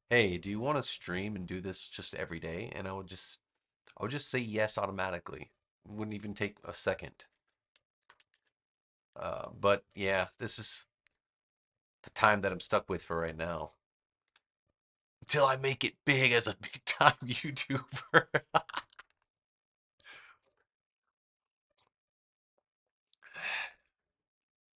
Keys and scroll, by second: 7.9 super+-, 9.0 super+=, 13.2 space.